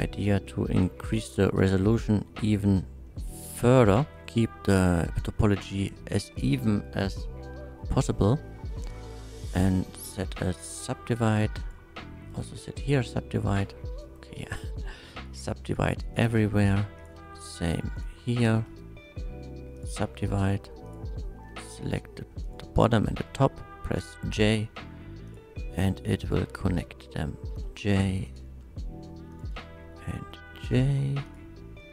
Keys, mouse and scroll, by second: 0.1 shift+middle click, 1.2 shift+click, 1.9 Tab, 1.9 middle click, 2.4 middle click, 3.1-3.5 middle drag, 4.2 2, 7.1-9.2 shift+middle drag, 9.2 shift+right click, 10.7 shift+click, 11.6 click, 12.3 right click, 12.8 click, 13.5 click, 14.0 right click, 15.2 right click, 15.7 click, 16.1 click, 16.5 right click, 17.0 click, 17.2 2, 17.6 shift+click, 18.0 shift+click, 18.4 shift+click, 18.7 shift+right click, 19.8 shift+click, 20.2 1, 20.8 click, 22.4 shift+click, 24.0 j, 25.3 click, 26.2 shift+click, 27.5 j, 28.3 click, 29.3 shift+click, 30.4 j, 31.2 click.